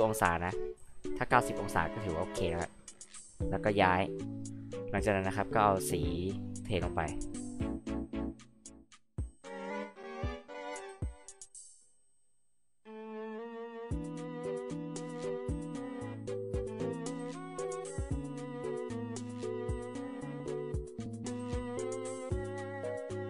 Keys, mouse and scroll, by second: 0.3 click, 2.6 click, 6.5 click, 6.7 click, 8.0 click, 8.2 click, 8.4 click, 8.5 h, 8.6 click, 8.8 t, 9.5 click, 9.8 click, 10.0 click, 10.4 click, 10.6 click, 10.8-14.6 typing, 12.7 click, 13.2 click, 13.5 click, 14.0 click, 14.4 click, 14.9 ctrl+z, 15.2 click, 16.1 click, 17.2 click, 17.5 h, 17.6 click, 18.0 m, 18.4 click, 18.6 click, 18.8 click, 20.4 click, 21.1 j, 21.1 drag.